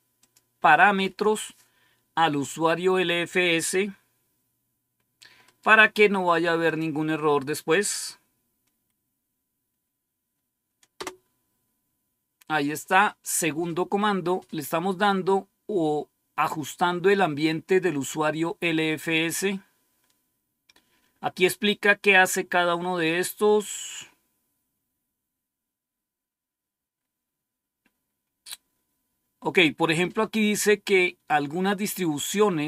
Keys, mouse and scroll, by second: 0.1 click, 5.4 right click, 5.7 right click, 6.6 click, 10.9 Return, 14.0-14.6 scroll down 2, 14.6-18.4 scroll down 1, 18.4-19.1 scroll down 1, 19.9-22.0 scroll down 3, 22.0-23.5 scroll down 1, 23.9-30.6 scroll up 2, 30.6-32.6 scroll up 1.